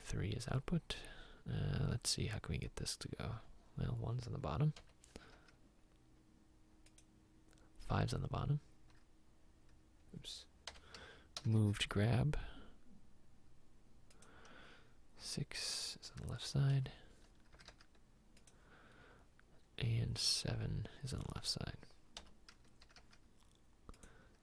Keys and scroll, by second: 4.9 m, 5.4 r, 9.1 r, 10.7 m, 11.4 r, 11.7 r, 16.8 m, 17.8 r, 22.3 m, 23.0 r.